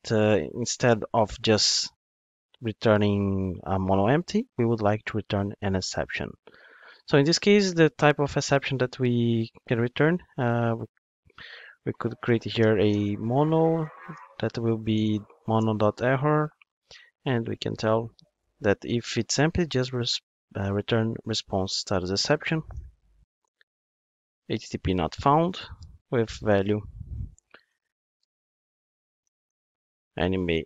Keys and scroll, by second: 15.6 Return, 19.9 Return, 24.3 Return.